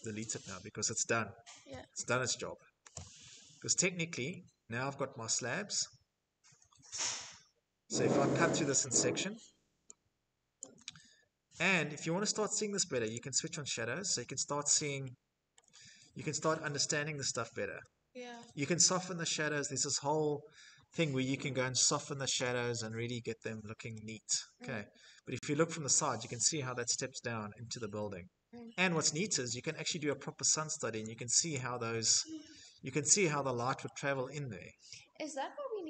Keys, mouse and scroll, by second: 1.9 Delete, 2.9 middle click, 3.1 middle click, 4.2 shift+middle click, 7.8 click, 9.6 click, 12.2 click, 13.8 middle click, 14.5 middle click, 14.7 middle click, 14.8 middle click, 16.3 shift+middle click, 18.3 middle click, 21.9 click, 22.1 click, 25.9 middle click, 26.5 middle click, 26.5 scroll, 27.8-28.2 scroll, 29.1 middle click, 30.5 click, 31.5 middle click, 31.5 middle click, 32.8 shift+middle click, 33.6 middle click, 33.6 middle click, 33.7 middle click, 33.8 middle click, 35.0 shift+middle click.